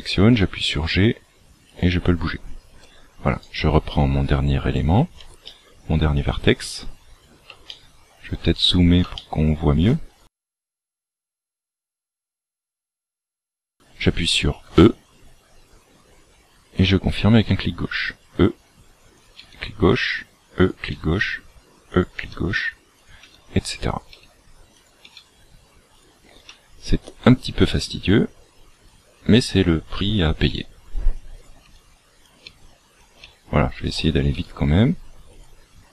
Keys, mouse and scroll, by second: 0.3 g, 3.4 right click, 5.4 shift+middle click, 7.1-7.4 scroll up 2, 7.6 shift+middle click, 8.6 scroll up 1, 9.2 shift+middle click, 11.2 shift+middle click, 12.2-12.8 scroll up 1, 14.6 e, 17.3 e, 19.4 e, 20.9 e, 22.2 e, 23.2 e, 24.0 e, 26.5 e, 27.8 e, 29.2 e, 30.4 e, 31.6 e, 32.4 e, 34.4 e.